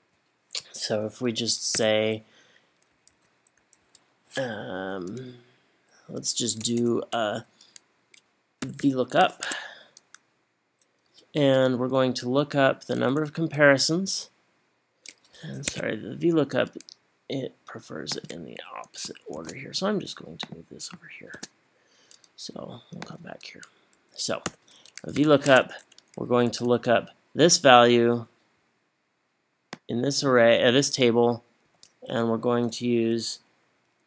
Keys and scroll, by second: 1.8 =, 3.1 Right, 3.6 Up, 3.8 Right, 6.7 BackSpace, 8.4-9.3 typing, 9.5 Tab, 12.6 Up, 12.8 Up, 13.0 Up, 13.2 Up, 19.4 super+x, 21.3 super+v, 24.5 =, 25.2 v, 25.5 Tab, 26.2 Up, 26.5 Up, 28.2 ,, 31.7 ,.